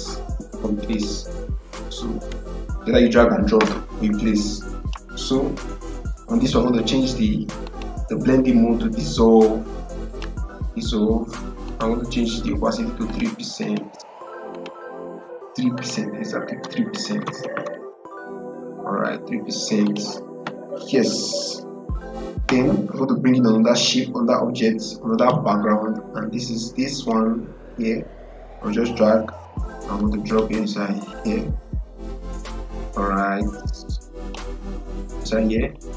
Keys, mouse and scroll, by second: 4.7 click, 7.6 click, 10.0 click, 17.0 BackSpace, 19.7 click, 25.1-32.5 drag, 32.5-35.9 drag.